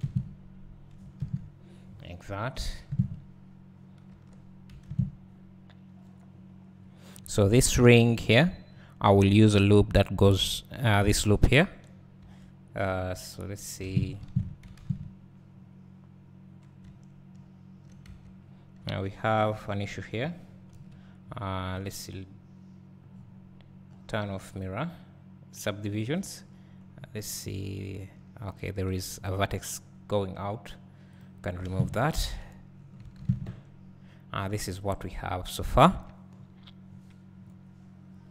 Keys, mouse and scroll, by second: 0.0 alt+a, 0.5-3.6 scroll down 1, 6.3 scroll down 1, 6.7 scroll up 1, 7.4 Tab, 8.1 2, 10.8-11.7 scroll down 1, 13.7 click, 16.2-16.8 scroll down 1, 16.8 `, 18.2 Tab, 18.4 scroll up 1, 19.0 1, 19.4 click, 19.6 `, 20.7 KP_Decimal, 21.0 KP_Decimal, 21.7-25.5 scroll down 1, 25.5 click, 26.2 `, 26.5-27.4 scroll down 2, 27.4 `, 28.6 click, 28.8 x, 31.2 click, 31.6 alt+a, 32.0-32.3 scroll down 2, 32.3 Tab, 32.7 scroll down 1, 33.4 `, 36.3-36.8 scroll down 2, 36.8-37.9 scroll up 2, 37.9-38.3 scroll up 1.